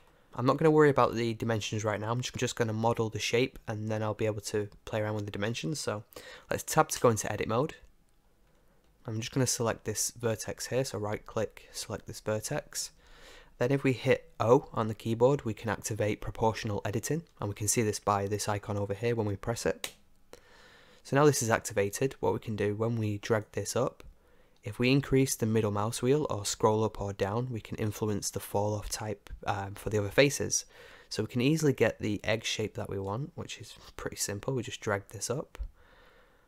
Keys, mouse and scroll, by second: 0.2-7.0 middle drag, 7.0 Tab, 8.4-9.9 middle drag, 10.2-12.1 right drag, 12.1-15.1 middle drag, 19.8 o, 22.6 middle click, 23.4-28.2 drag, 34.0 Tab, 34.3-36.4 middle drag.